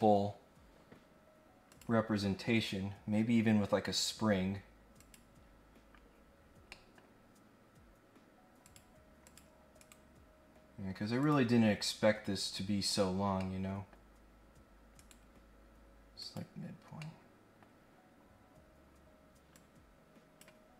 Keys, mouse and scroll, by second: 1.7 click, 5.0 click, 5.8 scroll down 1, 6.0-6.5 scroll up 2, 6.7 middle click, 8.6 click, 9.2 click, 9.8 right click, 11.2 click, 11.9-12.4 scroll down 2, 12.6-13.1 scroll up 2, 13.4 middle click, 14.9 right click, 16.2 click, 16.9 scroll down 1, 17.0 middle click, 19.5 click.